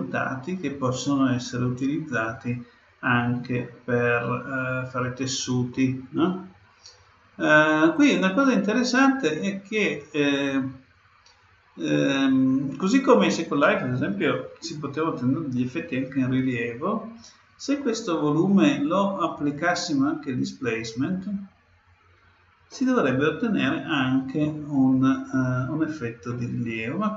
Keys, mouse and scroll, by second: 3.5-6.8 middle drag, 7.9-9.7 drag, 18.4-20.2 drag, 22.7-24.5 middle drag, 26.2-27.1 middle drag.